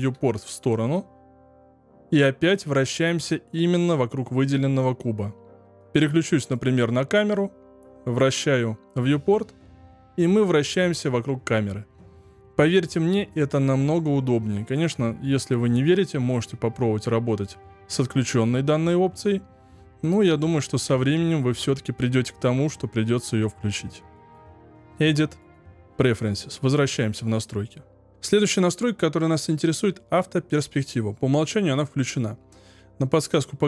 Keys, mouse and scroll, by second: 6.5 click, 7.3-10.3 middle drag, 13.3-16.5 shift+middle drag, 24.1 click.